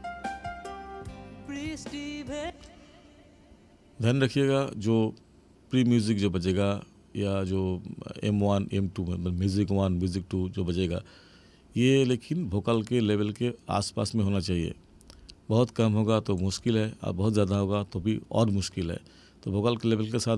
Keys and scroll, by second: 2.4 space.